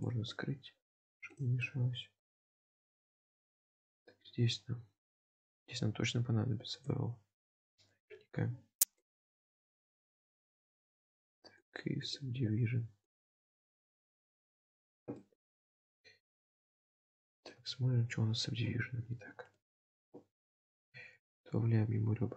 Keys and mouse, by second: 1.4 drag, 1.7-2.3 middle drag, 2.8 shift+middle click, 4.0-7.0 drag, 9.1 click, 11.7 click, 12.2-13.3 drag, 14.6 click, 15.2 shift+middle drag, 16.4-17.5 middle drag, 18.7 Tab, 18.7 KP_7, 19.6 shift+middle click, 20.9 ctrl+r.